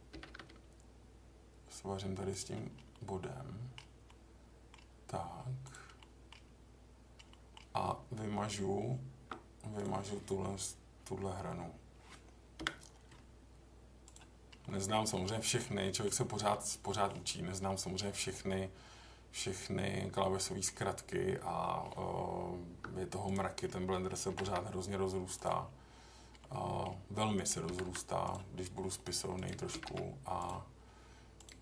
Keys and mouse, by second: 0.1 g, 0.2 g, 2.3 click, 2.9 middle click, 4.0 middle click, 5.6 click, 6.0 middle click, 7.3 middle drag, 8.7 Tab, 9.8 click, 12.5 Delete, 14.6-15.6 middle drag, 15.8 middle drag, 16.5 middle click, 17.6-20.6 middle drag, 22.0 Tab, 24.3 g, 24.4 g, 25.3 click, 26.4 middle click, 27.6 g, 27.8 g, 28.2 click, 29.7 g, 29.8 g.